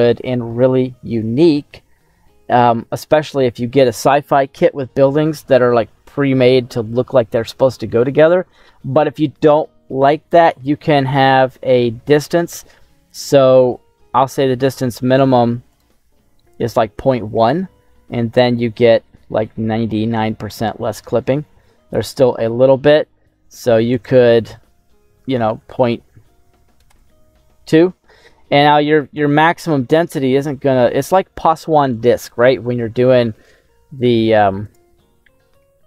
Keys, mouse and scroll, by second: 0.4-3.2 middle drag, 7.7 scroll down 1, 15.7 click, 17.5 scroll down 1, 17.8-21.7 middle drag, 23.8-26.9 drag, 28.4 right click, 28.4 scroll down 1, 28.5 middle click, 28.5 scroll up 1, 29.2 middle click, 29.2 scroll down 1, 34.6 click, 35.4-35.8 middle drag.